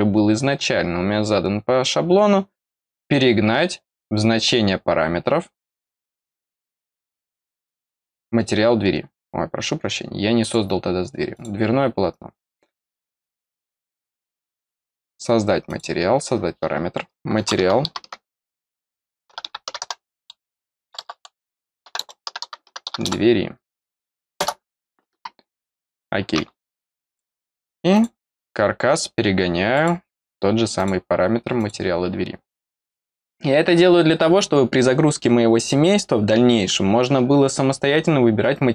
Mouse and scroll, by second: 5.8 click, 10.3 click, 11.3 click, 12.3 click, 14.3 click, 15.6 click, 25.7 click, 27.0 click, 27.9 click, 29.7 click, 30.7 click, 31.5 click.